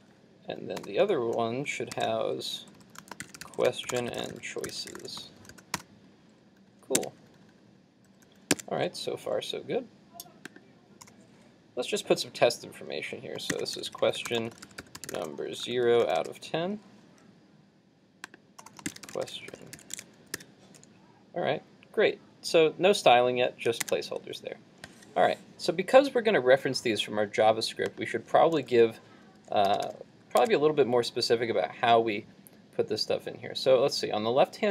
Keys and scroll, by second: 19.8 super+s, 20.1 super+Tab, 20.4 super+r, 23.8 super+Tab, 30.4 super+Tab.